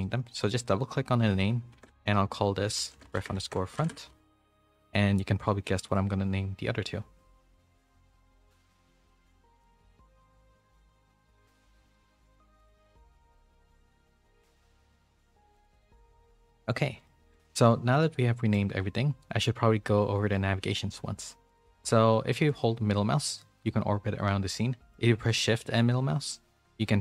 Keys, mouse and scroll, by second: 0.4 click, 1.4-5.2 shift+drag, 7.3-10.7 shift+drag, 11.2 click, 12.1-16.3 shift+drag, 17.3 middle click, 18.1 middle click, 22.4-24.9 middle drag, 25.6-27.0 shift+middle drag.